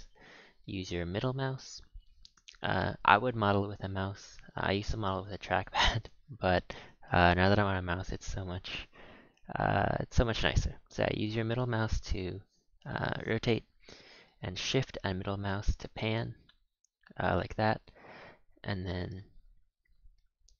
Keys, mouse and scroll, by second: 3.1-4.0 scroll up 5, 4.0-4.7 scroll down 1, 4.7-5.4 shift+middle drag, 5.4-6.0 scroll down 2, 6.0-7.4 middle drag, 7.4-8.7 scroll down 2, 10.5-15.6 middle drag, 15.6 scroll up 3, 15.7-17.8 shift+middle drag, 17.8-18.2 scroll down 3, 18.2-19.6 middle drag, 19.6-20.1 scroll up 3, 20.1-20.5 middle drag.